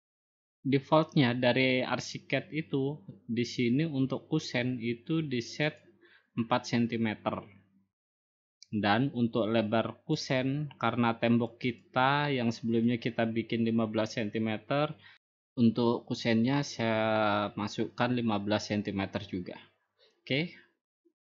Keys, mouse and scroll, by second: 6.6-7.7 drag, 11.1-12.2 drag, 12.6-13.7 drag, 17.7-18.3 typing.